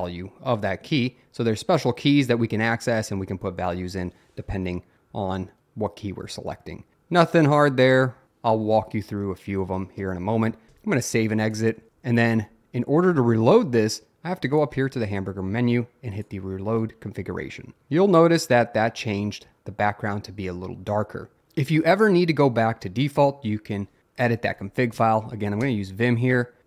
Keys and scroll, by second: 10.7 Return, 25.0 Up, 25.7 Return.